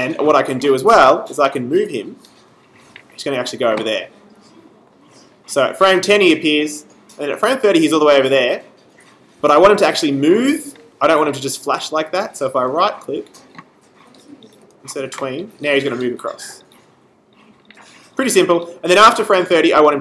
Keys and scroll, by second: 1.1 v.